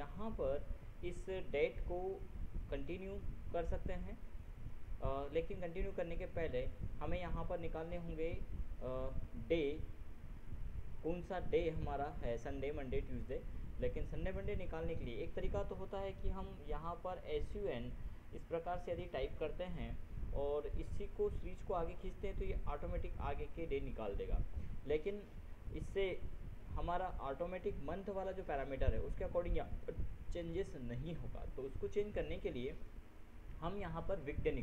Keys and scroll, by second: 16.1 ctrl+s, 16.3 ctrl+a, 18.0 ctrl+BackSpace, 19.1 ctrl+u, 19.7 ctrl+Tab.